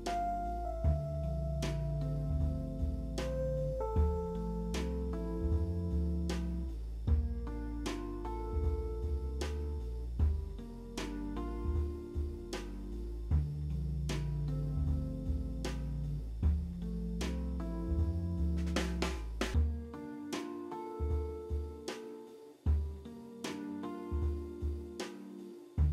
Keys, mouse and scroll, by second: 1.2 middle click, 1.7 ctrl+c, 2.5 ctrl+c, 2.5 ctrl+c, 5.5 alt+w, 6.3 z, 7.3 p, 9.0 alt+middle click, 9.5 scroll up 3, 10.1 alt+middle click, 11.2 w, 11.8 alt+middle click, 16.3 middle click, 17.8 middle click, 22.3 shift+click, 23.9 c, 24.2 middle click, 25.3 alt+middle click.